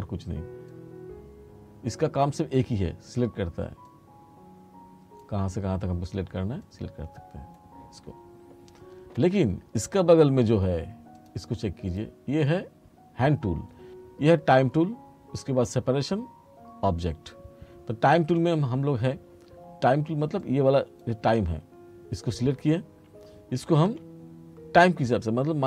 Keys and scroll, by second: 23.7 r.